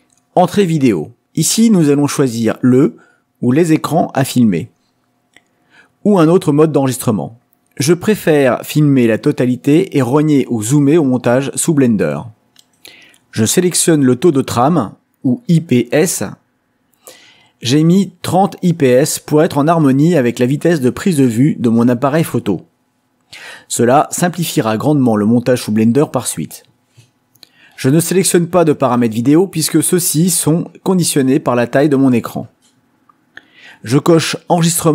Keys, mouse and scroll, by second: 2.1 click, 7.2 click, 12.8 click.